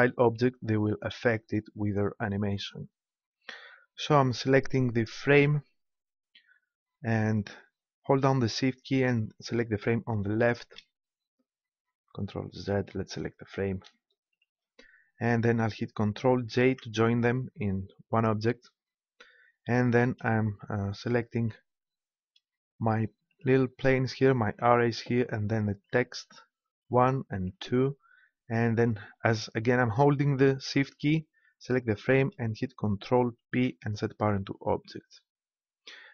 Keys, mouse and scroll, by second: 5.3-7.2 right drag, 10.5-12.2 right drag, 12.6 ctrl+z, 13.9 ctrl+z, 15.8 right click, 16.6 ctrl+j, 21.3-24.6 right drag, 24.6 click, 25.7-29.1 drag, 31.9-33.4 drag, 33.4 ctrl+p.